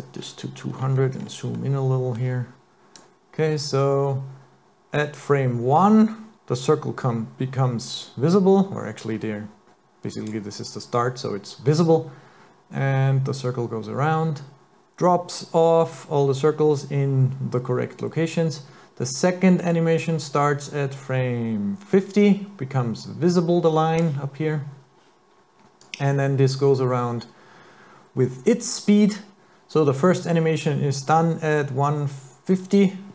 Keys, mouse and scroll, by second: 0.7-1.6 scroll up 10, 1.6 middle click, 3.0 click, 11.8 click, 25.9 click.